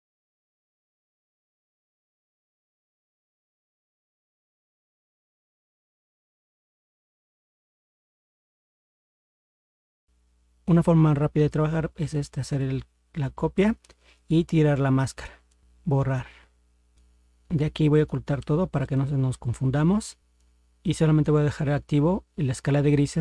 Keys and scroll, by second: 4.4 ctrl+z.